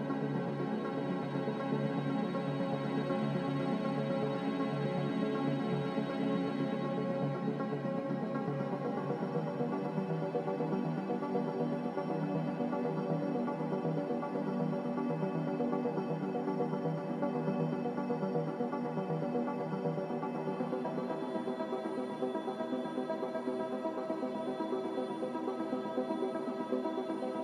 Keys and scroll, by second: 8.0 z, 14.6 z, 24.6 5, 24.9 Return.